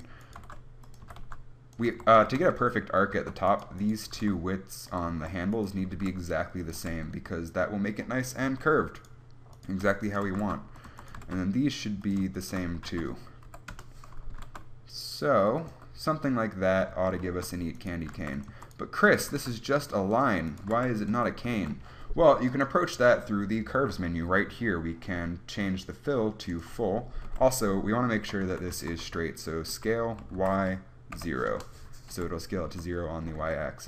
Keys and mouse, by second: 0.1-1.1 drag, 0.6 g, 1.3 s, 2.1 a, 2.8 Tab, 3.4 Tab, 4.3 g, 5.4 a, 6.2 click, 6.2 g, 7.0 a, 7.2-8.7 drag, 7.4 Tab, 8.7 Tab, 10.5 g, 11.1 a, 11.4 g, 13.1 s, 14.6 g, 15.9 Tab, 17.2 Tab, 18.3 g, 18.8 a, 19.5 g, 20.9 g, 21.4 Tab, 26.5-27.5 drag, 27.5 KP_3, 28.5 Tab, 28.7 a, 29.3 s, 30.0 s, 32.4 KP_1, 32.9 a, 33.7 Tab.